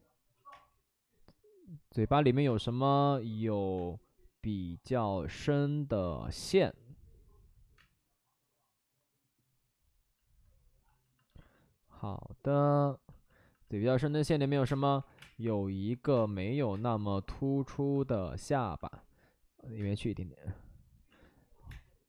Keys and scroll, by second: 0.5 space, 1.0 space, 1.1 space, 6.0 ctrl+z, 7.7 space, 14.6-16.7 typing, 19.7 space, 21.6 space.